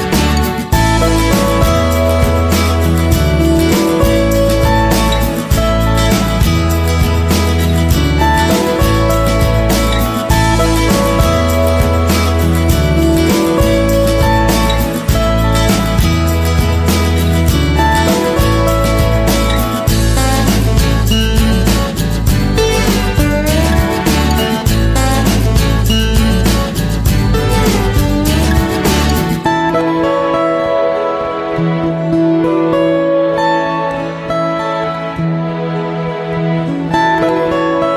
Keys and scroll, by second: 19.5 Right, 27.7 ctrl+z.